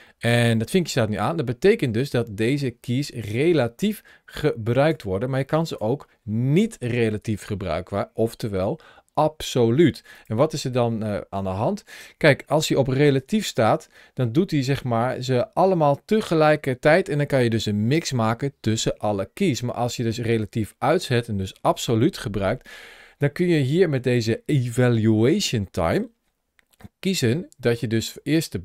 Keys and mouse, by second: 1.7 middle click, 3.6-4.7 drag, 5.5 click, 10.0 click, 12.8 ctrl+shift+a.